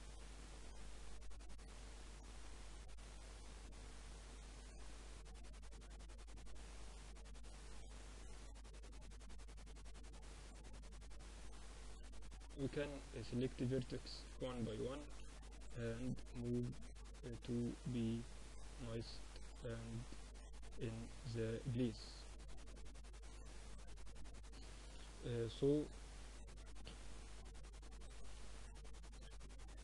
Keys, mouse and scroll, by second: 0.5 Tab, 0.7 z, 1.4 z, 2.1 Tab, 3.3 Tab, 3.9 Tab, 4.3 Tab, 4.6 z, 5.3-6.9 middle drag, 8.0 middle click, 8.5 Tab, 10.5 click, 11.0-13.7 middle drag, 14.1 click, 14.5 click, 16.6-17.7 drag, 18.0 Tab, 18.2-20.1 middle drag, 21.2-26.4 middle drag, 25.9 Tab, 27.3 z, 27.7 Tab, 27.7 middle click, 28.1 click, 28.3 Tab, 28.8 Tab, 29.1 Tab, 29.7 a.